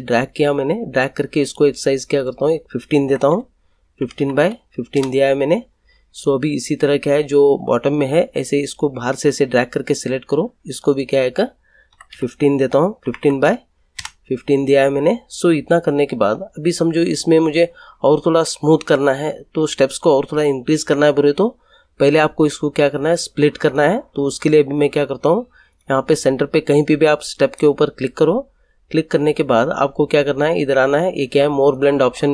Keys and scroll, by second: 3.0-4.9 typing, 4.9 Return, 11.6-13.9 typing, 13.9 Return.